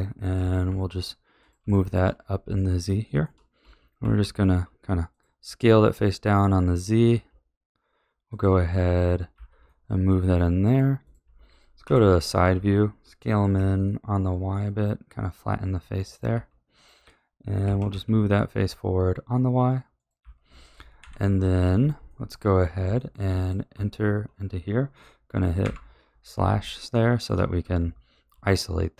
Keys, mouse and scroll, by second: 0.3 g, 1.7 shift+middle click, 2.1-2.5 scroll up 2, 2.5-3.5 shift+middle drag, 3.5 s, 7.0 s, 9.3 a, 9.6-11.0 middle drag, 11.0 click, 11.8 KP_3, 12.5 s, 16.3 a, 16.7 click, 17.6 g, 20.1 a, 20.9 KP_1, 22.0-22.5 shift+middle drag, 22.5-22.9 scroll up 3, 22.9-23.3 shift+middle drag, 23.3 click, 23.7 Tab, 25.6 KP_Divide, 26.8-27.6 shift+middle drag, 27.6 a, 28.3 Tab.